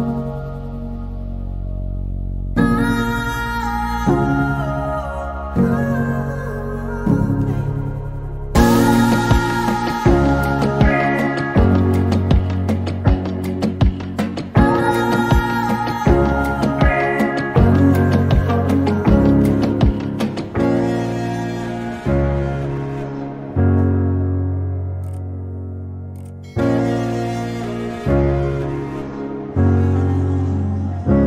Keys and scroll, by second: 4.3-7.0 typing, 8.5-8.8 typing, 10.4 p, 16.3 m, 22.7 r, 25.3 f, 28.9-29.6 typing.